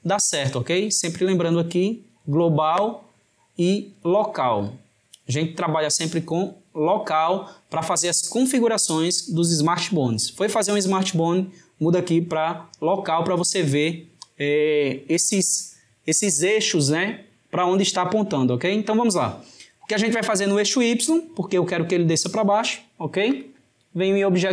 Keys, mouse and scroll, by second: 1.4-4.4 drag, 23.4-24.5 drag.